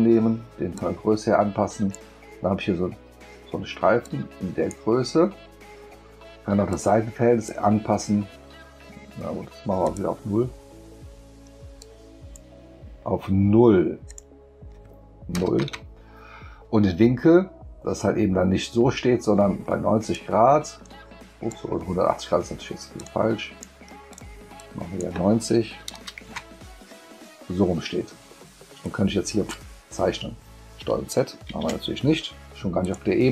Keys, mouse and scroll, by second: 0.8-1.9 drag, 4.0 click, 6.7 click, 9.8 click, 11.8 click, 14.1 click, 20.1-21.5 drag, 23.0 click, 24.1 click, 24.6 click, 28.8-29.5 drag, 31.5 ctrl+z, 32.8 click.